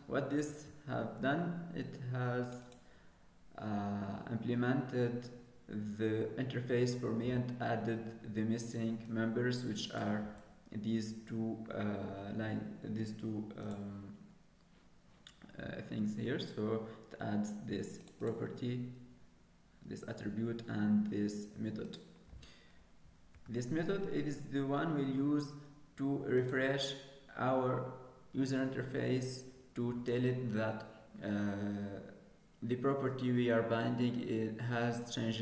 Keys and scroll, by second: 23.2 alt+Return, 23.3 Tab.